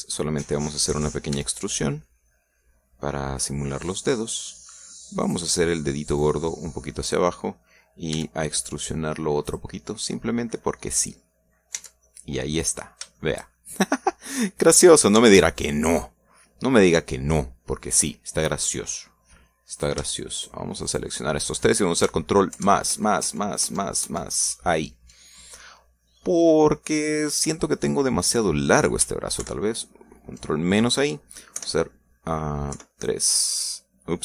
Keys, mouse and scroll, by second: 1.0 middle click, 2.3 e, 4.7 click, 7.1-8.2 drag, 9.1 e, 10.4 click, 11.0-12.3 middle drag, 12.3-12.8 scroll down 1, 12.7 Tab, 13.0 middle click, 13.6 scroll down 1, 14.1-15.6 shift+middle drag, 15.7 scroll up 2, 16.1 Tab, 16.8-18.8 middle drag, 19.5 middle click, 20.7 right click, 21.3 shift+right click, 21.8 shift+right click, 23.5 ctrl+KP_Add, 27.1-28.3 middle drag, 30.3 ctrl+KP_Subtract, 32.5 KP_1, 33.7 KP_3.